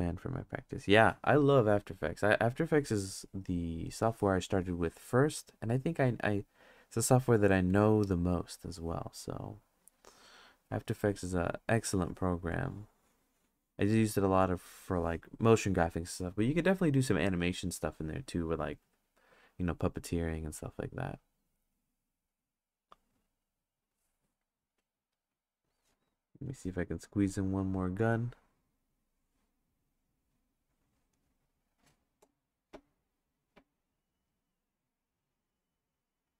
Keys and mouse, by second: 3.9-5.1 drag, 7.1 click, 7.7 click, 12.6-14.4 drag, 26.5 click, 28.9-30.0 drag, 30.6 click.